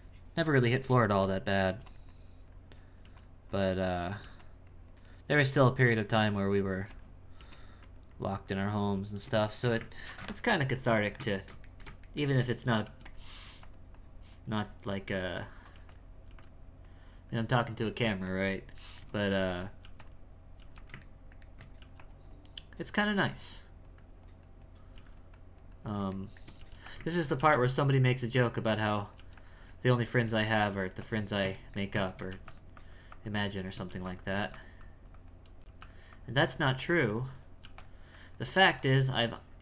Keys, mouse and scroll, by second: 1.6 f, 2.1 click, 3.5 click, 4.7 click, 5.9-7.4 drag, 7.8-9.5 drag, 9.5-12.8 shift+middle drag, 13.4 f, 13.9-15.7 drag, 15.7 f, 16.3 f, 16.8-18.3 drag, 18.3 shift+middle click, 19.3 f, 19.8 f, 21.1 ctrl+middle click, 22.3 click, 23.6-24.9 drag, 24.9 f, 25.3 click, 26.2 shift+middle click, 27.2 ctrl+middle click, 28.4 click, 29.7 click, 30.6-31.6 drag, 31.6 shift+middle click, 32.8 click, 33.6 shift+middle click, 34.3 f, 34.8 click, 35.6 f, 36.1-37.6 drag, 37.6 f, 38.1-39.6 drag.